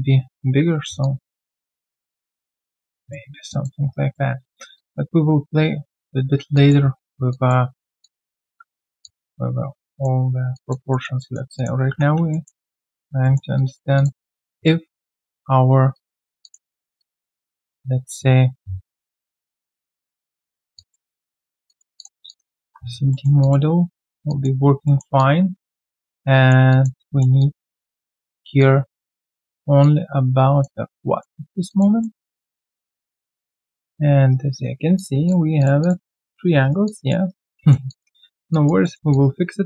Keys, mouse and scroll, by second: 1.0 alt+click, 1.8 alt+middle click, 2.2 alt+click, 3.5 alt+click, 3.9 right click, 3.9 q, 4.4-4.7 alt+scroll down 1, 4.7 alt+click, 6.5 alt+click, 8.5 alt+right click, 9.8 alt+click, 9.9 alt+middle click, 10.5 alt+click, 10.9 alt+middle click, 11.2 alt+click, 12.3 alt+middle click, 12.6 alt+click, 13.2 alt+middle click, 13.5 alt+click, 14.8 ctrl+a, 16.4 alt+click, 16.7 alt+middle click, 17.0 alt+click, 20.2 double click, 20.7 alt+click, 21.1 alt+double click, 21.4 alt+middle click, 21.6 alt+click, 22.2 alt+click, 22.6 alt+click, 23.1 alt+middle click, 23.4 alt+click, 24.8 alt+middle click, 25.1 alt+click, 26.7 alt+click, 27.0 alt+middle click, 27.4 alt+click, 28.2 alt+middle click, 28.6 alt+click, 29.3 alt+middle click, 29.5 alt+right click, 29.8 alt+click, 31.0 alt+click, 31.4 alt+right click, 31.7 alt+click, 32.0 alt+middle click, 32.4 alt+click, 34.3 right click, 35.2 double click, 36.6 alt+right click, 36.8 alt+click, 37.2 alt+right click, 37.5 alt+middle click, 37.8 alt+click, 38.2 alt+middle click, 38.5 alt+click, 38.8 alt+middle click, 39.1 alt+click.